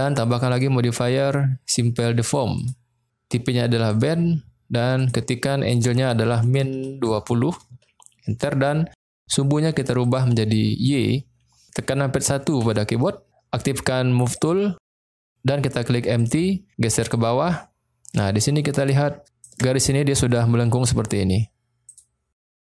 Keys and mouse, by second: 0.5-2.7 drag, 3.9 click, 5.1-9.1 drag, 10.0 click, 12.5 KP_1, 14.4 click, 17.1-19.3 drag.